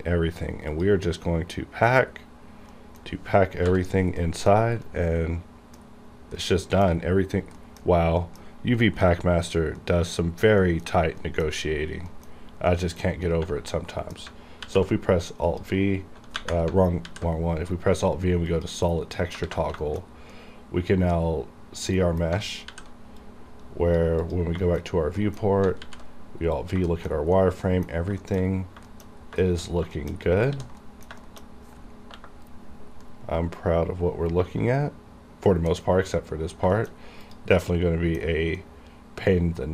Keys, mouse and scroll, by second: 2.2 scroll up 1, 2.8 middle click, 3.6 n, 4.3 middle click, 4.6 scroll down 1, 4.9-6.5 middle drag, 6.5 middle click, 7.3 scroll up 1, 7.6 middle click, 7.9-8.3 scroll up 1, 8.3 middle click, 8.5-8.8 scroll up 1, 9.9 middle click, 10.4 scroll down 1, 10.7 middle click, 11.6-12.2 scroll down 1, 12.2 middle click, 12.4 scroll up 1, 12.8 middle click, 13.2-13.5 scroll up 1, 14.0 middle click, 14.6 alt+v, 15.6 click, 17.1 alt+v, 18.6 click, 19.2 middle click, 19.5 alt+a, 19.9 shift+middle click, 19.9 shift+middle click, 20.2 scroll down 1, 20.4-22.6 middle drag, 22.6 alt+v, 23.3 click, 24.2 click, 24.7 shift+middle click, 24.8 shift+scroll down 1, 24.9 shift+scroll up 2, 25.3 middle click, 25.7 scroll up 1, 25.8 alt+v, 26.6 click, 27.0 shift+middle click, 27.4 middle click, 28.0 scroll down 1, 28.3 shift+middle click, 28.6 scroll up 2, 28.9 shift+middle click, 29.0 shift+middle click, 29.2 scroll down 2, 29.5 shift+middle click, 29.8-30.4 scroll down 3, 30.0 shift+middle click, 30.6 ctrl+s, 30.9 middle click, 31.3 shift+middle click, 33.1-35.8 middle drag, 35.8 scroll up 1, 36.7 scroll down 1, 36.8 shift+middle click, 37.0 shift+scroll up 2, 37.3 click, 37.6 middle click, 38.3 scroll up 1, 38.7-39.7 middle drag.